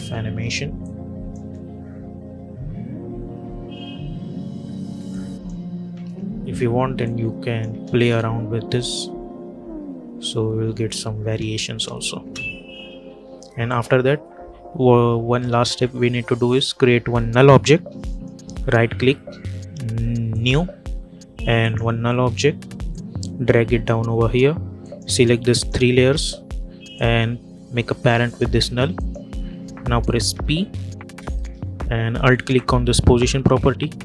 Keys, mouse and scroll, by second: 0.7 click, 1.3 space, 4.0 space, 5.0 click, 5.8-6.4 typing, 6.9 click, 7.6 space, 11.1 space, 12.8 -, 13.6 click, 18.0 right click, 20.2-24.7 drag, 25.4-28.9 shift+drag, 30.2 p, 32.4 alt+click.